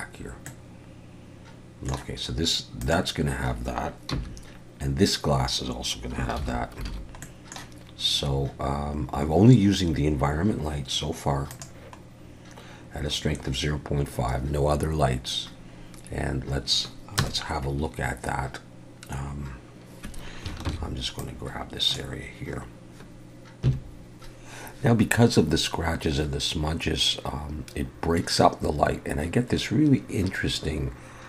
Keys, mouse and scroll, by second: 0.5 middle click, 2.8 click, 4.1 h, 6.4 alt+h, 6.9 alt+a, 7.2 middle click, 8.4 scroll down 1, 13.8 click, 17.2 KP_0, 20.7 ctrl+b, 23.7 F12.